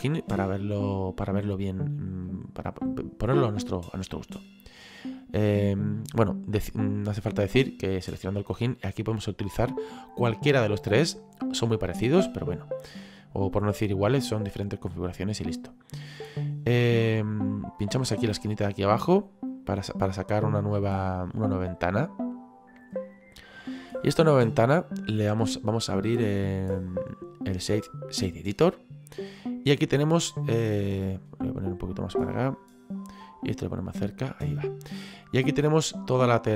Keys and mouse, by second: 2.3 middle click, 3.5 middle click, 7.5 right click, 8.6 click, 13.1 click, 17.7 click, 19.5 click, 20.8 click, 24.2 click, 28.6 click, 32.0 click, 35.2 middle click.